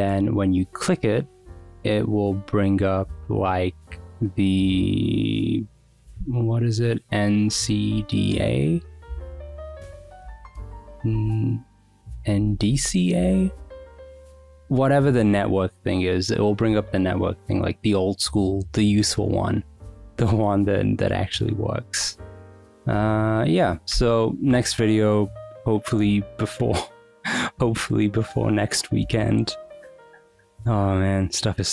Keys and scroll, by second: 6.2 super+r, 6.8-8.7 typing, 11.1 n, 12.1-13.1 typing, 15.4 Escape.